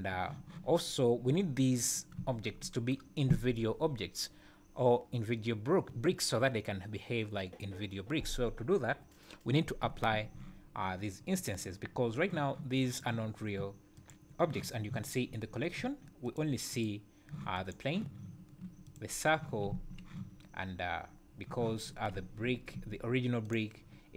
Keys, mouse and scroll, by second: 1.8 click, 11.4 click, 12.9 click, 14.0 click, 16.2 click, 16.7 click, 17.5 click, 18.8 click, 22.1 `, 22.7 `, 23.4 click.